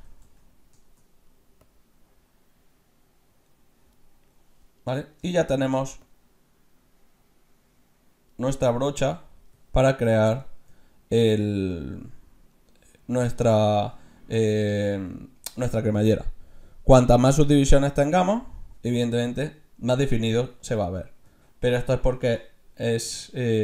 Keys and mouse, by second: 0.3 Tab, 1.1 middle click, 4.7-6.1 middle drag, 6.1-7.7 drag, 9.0-17.2 middle drag, 18.0-19.7 drag, 22.5-23.6 middle drag.